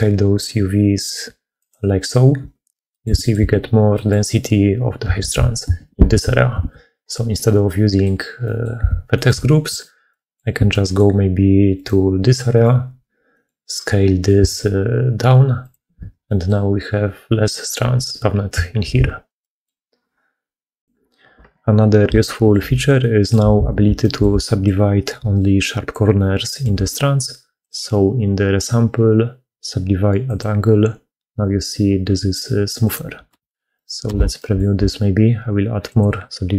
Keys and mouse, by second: 2.8 click, 3.0 shift+click, 3.8 middle click, 5.2 ctrl+z, 6.0 ctrl+z, 6.6 ctrl+z, 7.5 click, 7.5 right click, 7.7 middle click, 8.3 middle click, 9.0 middle click, 9.3 shift+middle click, 9.9 middle click, 10.6 middle click, 11.6 click, 12.4 middle click, 13.2 middle click, 14.5 s, 16.1 middle click, 18.9 ctrl+z, 19.3 click, 22.1 shift+middle click, 22.9 middle click, 23.5 alt+a, 23.9 shift+middle click, 24.3 middle click, 25.1-26.5 d, 26.1 click, 29.6-31.6 drag, 32.7 click, 33.1 alt+q, 33.7 click, 33.9 alt+q, 34.2 alt+click, 35.7-36.5 drag.